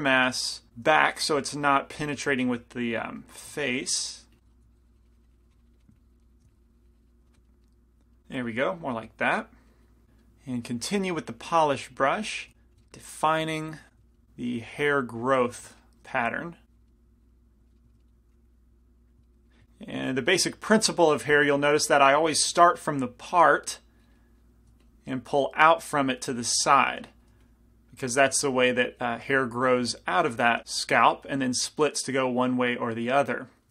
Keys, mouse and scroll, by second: 1.6 i, 2.2 f, 3.2 click, 7.2 middle click, 11.5-12.9 drag, 12.6 f, 13.9 f, 14.8-17.9 drag, 16.3 f, 17.9 right click, 18.4 f, 18.5-19.6 drag, 18.5-19.6 right drag, 21.6 f, 22.4 f, 23.2-25.1 drag, 24.9 f, 25.5-27.4 drag, 26.8 f, 27.5 f, 29.7 click, 31.0 click, 31.6 middle click, 31.6 right click, 31.7-33.7 drag, 32.8 middle click, 32.8 right click.